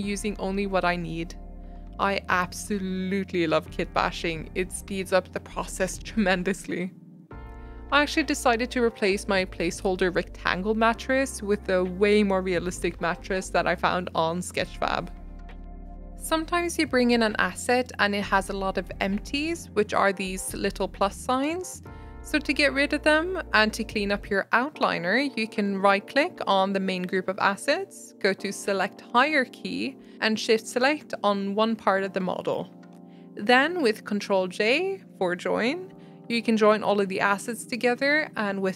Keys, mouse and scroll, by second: 0.0-0.4 scroll down 4, 0.1 shift+middle click, 0.4 shift+middle click, 0.5 alt+d, 1.1 shift+middle click, 1.2 alt+d, 2.1 shift+middle click, 2.5 alt+d, 3.8-6.6 typing, 4.5 middle click, 4.9 middle click, 5.3-5.9 middle drag, 6.4 middle click, 7.0 middle drag, 7.1 scroll down 3, 7.2-8.2 shift+middle drag, 8.2 g, 8.5 s, 8.7 middle click, 8.9 g, 9.7 middle click, 10.2 middle click, 10.4 scroll up 2, 10.5 middle click, 11.3-16.0 typing, 12.0 middle click, 16.6-17.8 middle drag, 17.8 s, 18.6 r, 24.2-30.5 right drag, 30.5 shift+click, 34.3 ctrl+j.